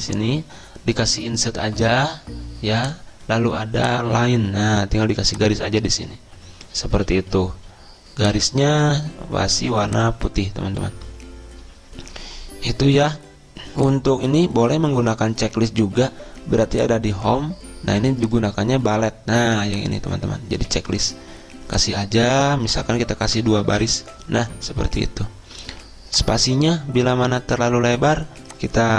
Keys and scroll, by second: 23.7 BackSpace, 24.1 Return.